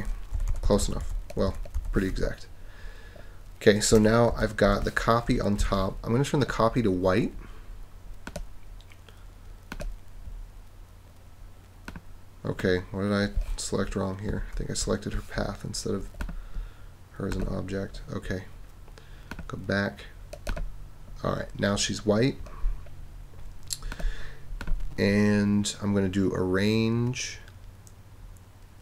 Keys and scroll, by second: 0.3 super+-, 4.3 super+-, 5.6 super+=, 14.3 super+z.